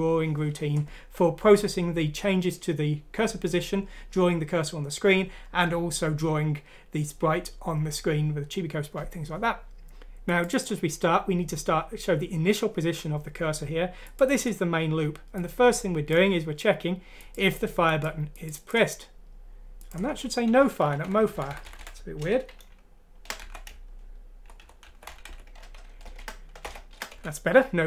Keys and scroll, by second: 20.8 shift+End, 21.0 Left, 22.6 n, 23.4 Delete, 23.7 Down, 24.0-24.8 typing, 24.2-24.5 Down, 24.8 shift+End, 24.8 Left, 24.8 Delete, 24.8 Down, 25.1 Home, 25.3 Delete, 26.0-27.1 typing.